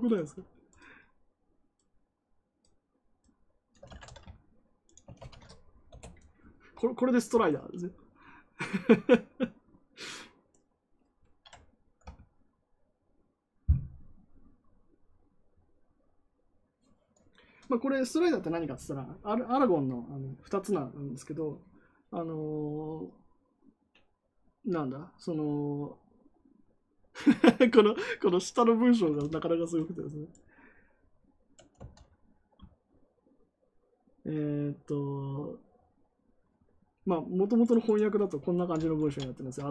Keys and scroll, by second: 3.8 ctrl+c, 5.1 ctrl+v, 5.8 Return, 31.7 ctrl+c, 38.9 shift+., 39.6 BackSpace.